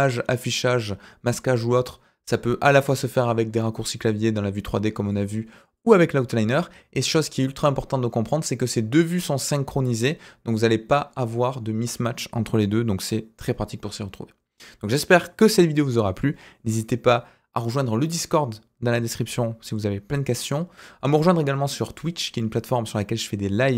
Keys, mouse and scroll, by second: 3.3 click, 5.0 click, 5.7 click, 6.9 click, 10.5 click.